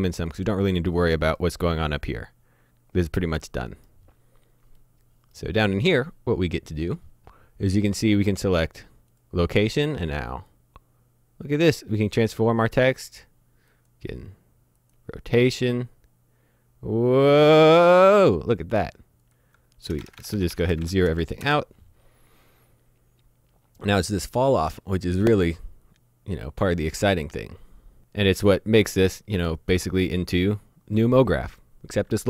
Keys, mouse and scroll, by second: 0.3 middle click, 2.4-3.4 scroll up 1, 3.4 middle click, 9.2 click, 19.9-21.1 typing, 20.0 Tab, 20.2 Tab, 20.4 Tab, 20.5 Tab, 20.8 Tab, 21.4 KP_Enter, 30.4 middle click.